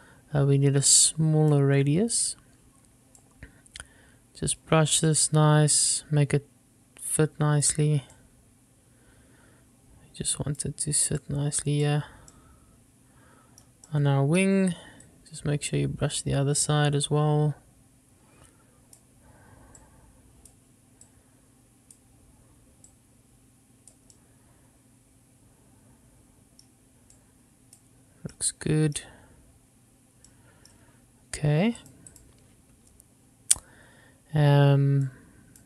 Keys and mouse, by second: 1.1 click, 3.5-4.8 drag, 5.4-8.0 drag, 8.4-10.9 drag, 11.5 click, 12.6-13.8 middle drag, 14.1 middle click, 15.3-19.2 drag, 20.1-20.8 drag, 21.3-22.2 drag, 23.1-24.2 drag, 24.3-26.2 middle drag, 26.4 middle click, 27.4-28.1 drag, 30.8-32.0 middle drag, 32.0 click, 35.4 click.